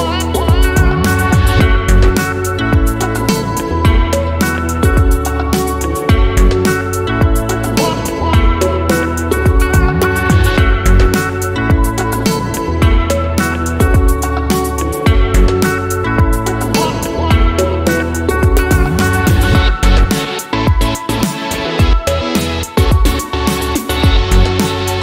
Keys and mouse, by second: 0.0-1.2 typing, 1.4 middle click, 1.7 shift+middle click, 1.8 middle click, 2.1 shift+middle click, 2.7-5.8 typing, 2.7 middle click, 3.4 middle click, 3.8 shift+click, 4.1 shift+middle click, 4.4 ctrl+z, 4.9 middle click, 5.1 shift+middle click, 5.3 middle click, 5.4 click, 5.9 middle click, 6.2 shift+middle click, 6.6 ctrl+r, 7.6 middle click, 8.5 middle click, 9.5 ctrl+r, 10.3 ctrl+z, 10.9 shift+middle click, 11.1 shift+z, 11.4 1, 11.6 click, 12.0 click, 12.4 g, 13.2 click, 13.5 ctrl+z, 13.7 click, 14.0 g, 14.8 click, 15.1 g, 15.9 Tab, 16.2 shift+z, 16.5 middle drag, 16.6 drag, 16.7 middle click, 16.8 Tab, 17.5 ctrl+r, 18.3 shift+middle click, 18.5 middle click, 18.7 shift+middle click, 18.9 shift+middle click, 19.0 middle click, 19.1 shift+middle click, 19.4 shift+middle click, 19.6 middle click, 20.0 Tab, 20.9 shift+middle click, 21.3 shift+middle click, 21.5 shift+middle click, 22.3 click, 23.2 shift+middle click, 23.5 alt+h, 23.8 shift+middle click, 24.7 a.